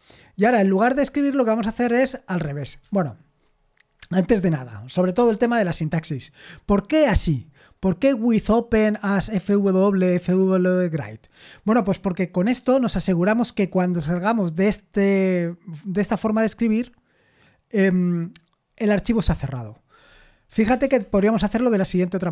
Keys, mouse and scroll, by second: 0.8-2.0 typing, 2.8 Escape, 20.1 o, 20.7 BackSpace, 21.0 Return.